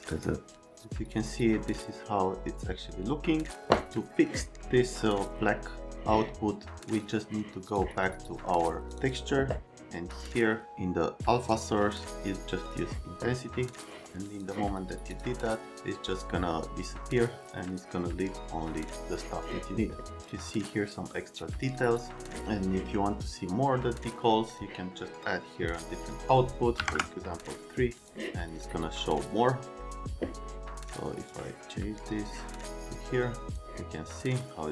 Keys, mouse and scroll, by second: 0.1 click, 0.6 click, 7.0 click, 8.5 right click, 9.0 click, 9.6 click, 11.5 click, 12.6 click, 13.7 click, 15.1 click, 23.6 middle click, 26.7 KP_3, 26.8 KP_Enter, 31.3 click, 33.5 click.